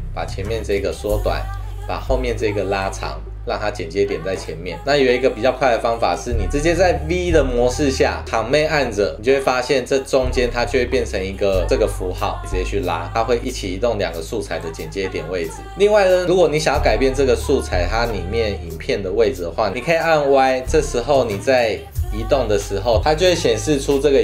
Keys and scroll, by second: 5.6 super+z, 7.1 v.